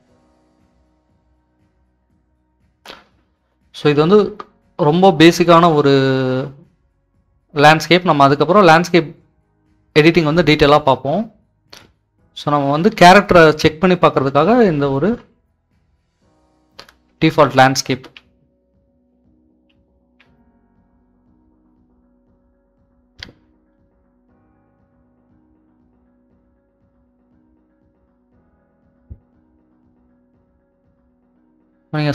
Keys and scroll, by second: 1.6-2.3 typing, 5.2 typing, 15.6-20.6 typing, 25.3 typing.